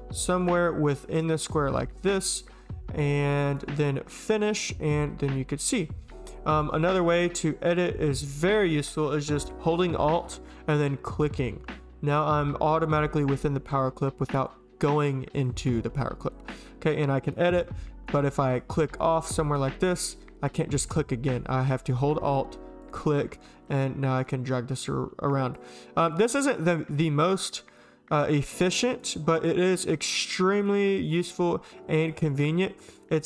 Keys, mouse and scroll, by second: 0.4 click, 0.9 click, 1.4 click, 1.8-2.3 drag, 3.2 click, 3.5 click, 4.2 click, 4.5 click, 14.5-14.9 drag, 15.4 click, 16.3 click, 17.0-17.3 drag, 17.6-18.1 drag, 19.4 click, 20.5 click, 21.3 click, 23.6 click, 24.8 click, 26.1 click, 28.3 click, 29.5 click, 32.0 alt+click.